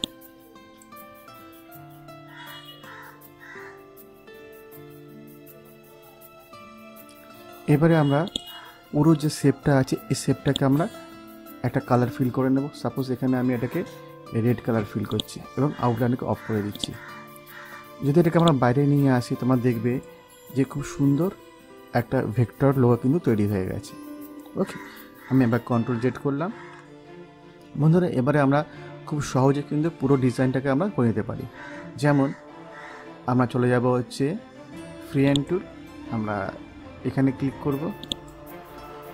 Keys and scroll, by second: 26.4 ctrl+z.